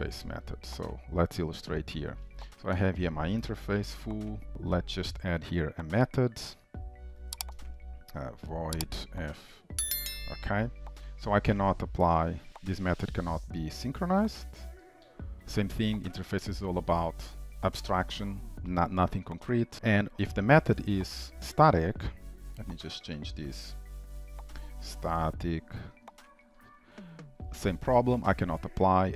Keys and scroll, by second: 0.9 Return, 21.2 ctrl+d, 27.4 ctrl+s.